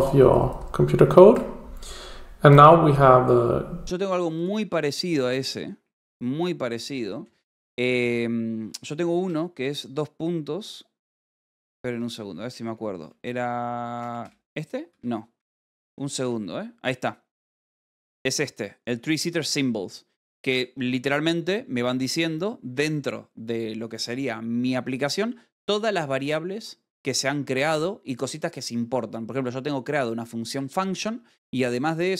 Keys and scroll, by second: 7.5-8.3 typing, 9.8 ;, 12.1 Escape, 13.2-14.8 typing, 16.7 s, 18.0 k, 18.7 BackSpace, 22.8 p.